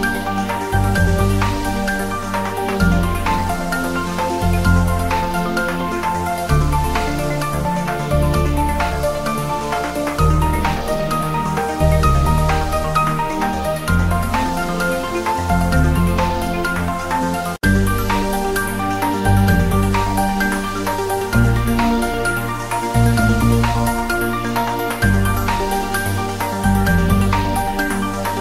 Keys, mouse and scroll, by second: 0.3-1.0 drag, 1.8-2.3 scroll down 1, 8.1-8.8 scroll down 1, 11.0 ctrl+a, 11.4 ctrl+s, 13.7-14.1 scroll down 1, 14.5 click, 14.8-15.5 scroll down 1, 15.5 click, 15.7-16.1 scroll down 1, 16.1 s, 16.4 x, 16.7 click, 17.1 Tab, 17.3 click, 19.9-20.6 click, 21.0 2, 21.1 click, 22.8 click, 24.0-24.3 scroll down 1, 24.3 e, 28.0-28.4 scroll up 1.